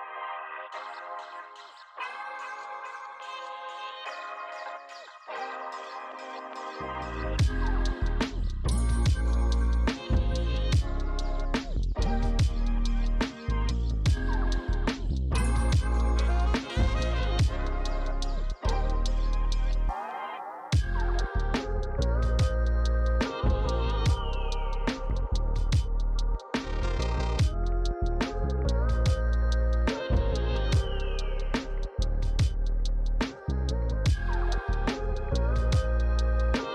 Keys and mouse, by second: 1.6 shift+click, 4.1 ctrl+z, 4.2 click, 4.6 alt+shift+click, 5.2 click, 5.7 alt+shift+click, 6.1 click, 6.7 alt+shift+click, 7.5 shift+click, 8.1 alt+shift+click, 8.6 click, 9.0 alt+shift+click, 10.7 shift+click, 13.5 shift+click, 14.0 ctrl+click, 14.5 shift+click, 15.7 click, 16.6 click, 18.1 click, 18.5 shift+d, 18.7 right click, 18.9 click, 19.5 Tab, 19.6 click, 21.6 click, 25.3 click, 31.9 click.